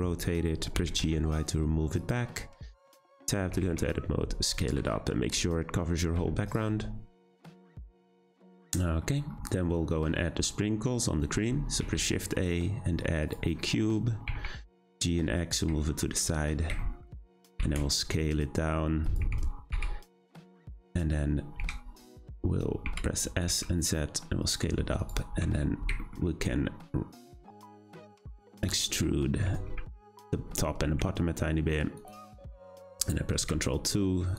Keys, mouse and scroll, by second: 0.7 g, 2.9 Tab, 3.5 a, 3.6 s, 4.8 `, 6.2 Tab, 6.5 click, 6.8-8.4 scroll up 3, 8.4-11.4 shift+middle drag, 11.8 shift+a, 14.2 g, 15.8-17.1 shift+middle drag, 17.1 scroll down 1, 17.4 Tab, 17.6 a, 17.8 s, 19.2 w, 19.7 w, 20.9-21.6 scroll up 2, 21.6 w, 22.8 s, 24.8 3, 25.0 click, 25.4 `, 26.0-27.2 shift+middle drag, 27.2 ctrl+right click, 27.8 middle click, 28.5 click, 29.6 `, 32.0 ctrl+right click, 32.4 Tab, 33.4 ctrl+2.